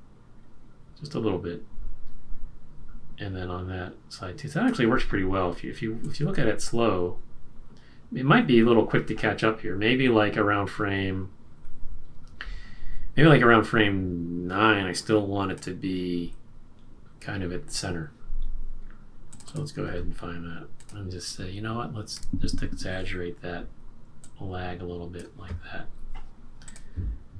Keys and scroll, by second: 22.1 F6.